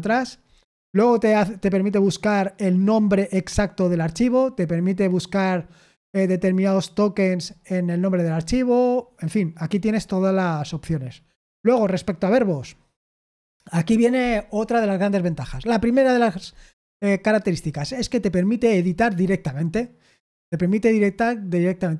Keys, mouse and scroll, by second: 0.9-4.1 scroll down 1, 4.1-7.4 scroll down 1, 7.4-8.0 scroll down 1, 8.0-8.9 scroll down 1, 8.9-9.7 scroll down 1, 9.7-10.5 scroll down 1, 10.5-21.9 scroll down 1.